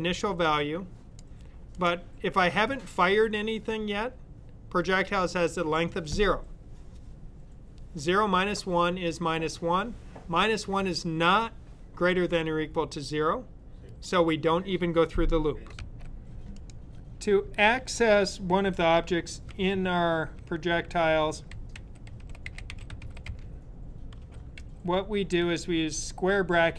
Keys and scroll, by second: 15.8 typing, 20.1-25.4 typing.